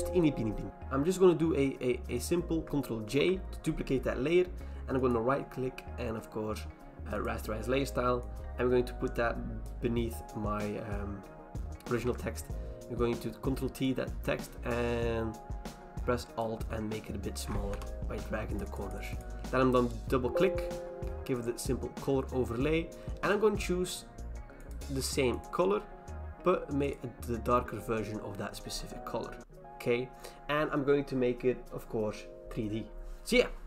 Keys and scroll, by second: 3.0 ctrl+j, 12.0 ctrl+t, 17.7 Return, 29.4 Return.